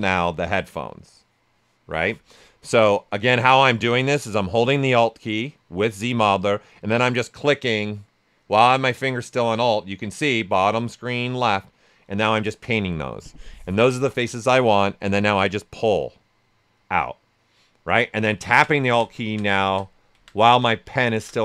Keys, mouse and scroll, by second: 3.4 ctrl+z, 6.7-15.2 alt+drag, 12.9 typing, 15.2-21.4 drag, 21.1 typing.